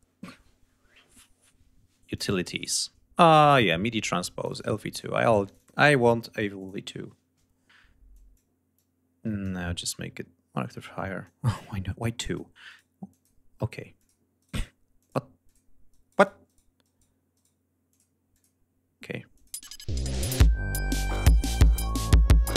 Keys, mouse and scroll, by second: 2.1 click, 4.2 click, 4.9 click, 6.5-7.3 drag, 8.1 click, 8.7 click, 10.1-10.6 scroll up 4, 11.2 click, 11.9 click, 12.6 right click, 13.0 click, 13.9 click, 14.3 right click, 14.9 click, 15.4 click, 15.8 right click, 16.7 right click, 17.3 right click, 17.8 click, 18.3 click, 19.3 click, 19.5 space, 21.0 click.